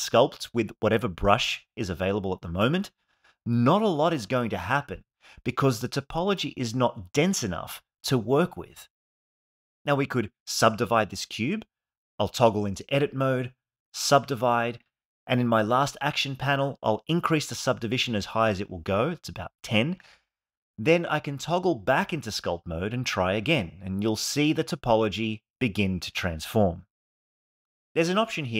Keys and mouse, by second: 9.9 ctrl+Tab, 12.6 right click, 15.7 click, 17.0-18.0 drag, 19.1 ctrl+Tab, 23.1 click.